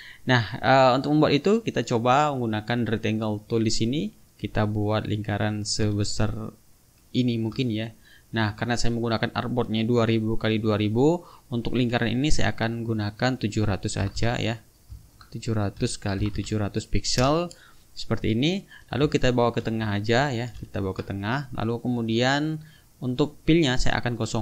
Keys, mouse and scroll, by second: 3.6 click, 5.6-7.3 ctrl+shift+drag, 8.5 click, 12.6 click, 13.7 KP_7, 14.0 KP_0, 15.0 ctrl+a, 15.8 KP_7, 16.2 KP_0, 17.2 Return, 18.2 click, 19.2 shift+click, 20.5 ctrl+alt+KP_5, 22.1 click, 23.0 click.